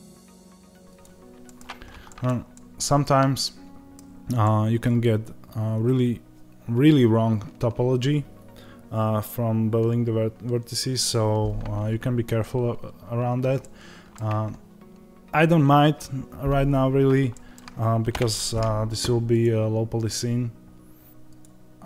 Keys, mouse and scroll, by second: 0.0 click, 0.1 g, 0.3 click, 1.3-3.8 middle drag, 3.8-4.3 scroll down 2, 4.3-19.3 middle drag, 14.2 Tab, 18.0 KP_0, 19.3 click.